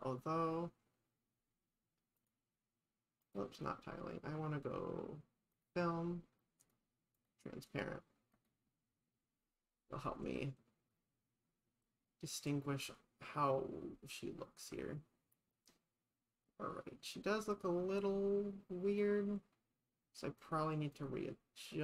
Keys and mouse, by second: 2.2 click, 3.2 click, 5.5 click, 6.7 click, 7.3 click, 7.7 click, 8.3 click, 20.5 click, 21.0 click.